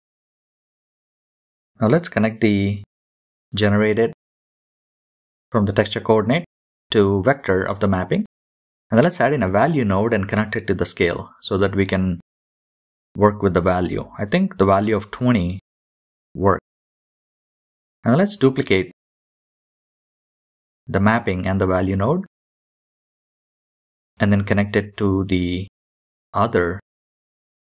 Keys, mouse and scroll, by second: 2.6 shift+a, 3.6 BackSpace, 6.1 click, 7.1-8.0 scroll up 3, 7.6-8.8 drag, 10.1-10.5 scroll up 6, 10.5-10.8 scroll down 1, 11.1 click, 11.1 scroll down 1, 12.1 scroll up 4, 13.2 scroll down 2, 13.9-14.2 scroll down 3, 14.2-14.6 middle drag, 14.6 scroll down 1, 15.3 click, 15.7 shift+d, 16.7 click, 17.0 shift+d, 18.8-24.3 drag, 24.3-25.5 middle drag, 27.4 shift+a.